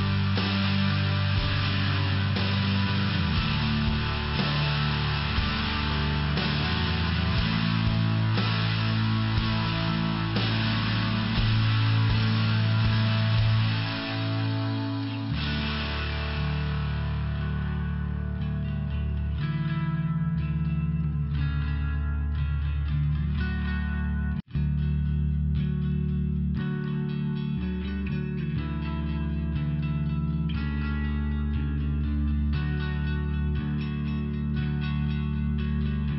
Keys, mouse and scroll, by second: 2.7 click, 4.9 click, 5.1 click, 5.5 click, 5.7 click, 6.1 click, 6.2 click, 6.5 click, 6.7 click, 7.1 click, 7.1 click, 7.9 [, 8.2 click, 8.3 click, 8.7 click, 8.8 click, 9.1 click, 9.2 double click, 9.9 double click, 10.1 double click, 10.9 click, 11.1 click, 11.5 click, 11.6 click, 12.0 click, 12.1 click, 12.5 click, 12.6 click, 12.9 click, 13.0 double click, 13.6 double click, 13.7 double click, 14.1 double click, 14.2 double click, 14.6 click, 14.8 click, 15.2 click, 15.3 click, 16.5 click, 16.7 click, 17.2 click, 17.3 click, 17.6 click, 17.6 click, 18.0 click, 18.1 click, 18.8 click, 18.8 click, 19.3 click, 19.4 click, 20.1 click, 20.2 click, 20.9 click, 21.0 click, 21.4 click, 21.5 click, 22.0 click, 22.1 click, 22.7 click, 24.9 click, 25.0 click, 25.4 click, 25.6 click, 25.9 click, 26.0 click, 27.1 click, 27.3 click, 28.6 click, 29.1 double click, 29.7 double click, 32.3 click, 32.4 click, 33.0 click, 33.0 click, 33.5 click, 33.6 click, 34.1 click, 34.2 click, 34.7 click, 34.8 click, 35.4 click, 35.5 click.